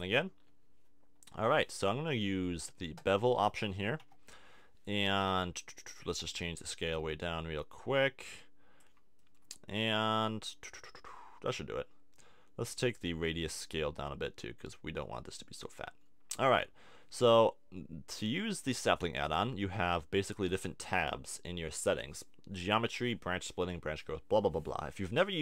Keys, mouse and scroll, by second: 4.2 KP_1, 4.7-6.7 middle drag, 7.9 click, 9.2-13.4 middle drag, 13.4-16.0 drag, 16.0 middle click.